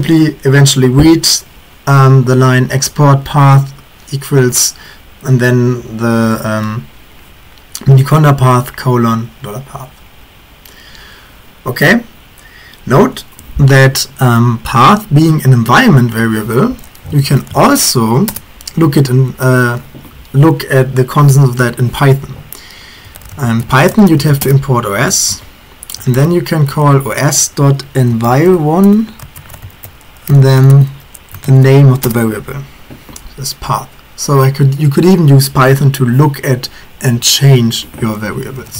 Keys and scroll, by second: 16.9-18.3 typing, 18.3 Return, 19.6 typing, 22.9-32.5 typing, 38.4-38.7 typing.